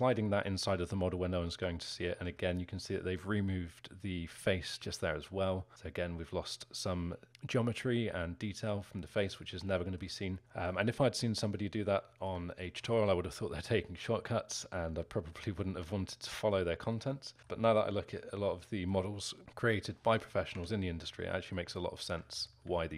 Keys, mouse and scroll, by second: 9.0 z, 9.6-10.7 alt+middle drag, 10.7-11.9 scroll down 1, 11.9-15.7 alt+middle drag, 15.7-16.2 scroll up 1, 16.2-17.7 alt+middle drag, 17.7-18.1 scroll down 3, 18.3-20.6 alt+middle drag, 20.6 Tab, 21.3-22.7 alt+middle drag, 22.7 z.